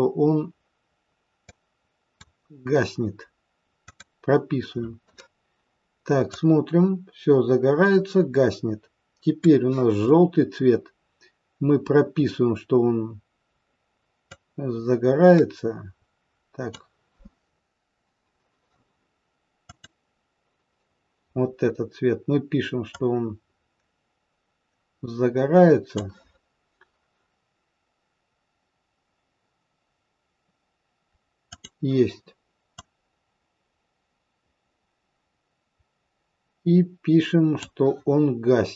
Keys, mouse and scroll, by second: 1.4 click, 3.8 click, 6.3 click, 14.2 click, 19.6 click, 23.0 click, 31.5 click, 32.8 click.